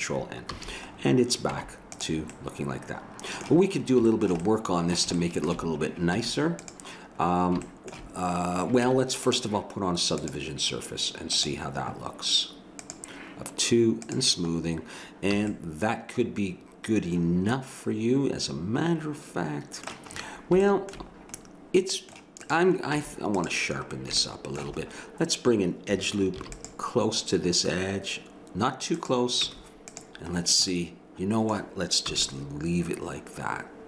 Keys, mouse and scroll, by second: 0.5 a, 1.5 Tab, 6.2 Tab, 8.8 Tab, 10.2-12.1 drag, 12.8-15.6 drag, 15.4 a, 15.6-17.1 middle drag, 20.6 middle click, 23.0 Tab, 26.3 ctrl+r, 29.5 Tab, 32.1 a.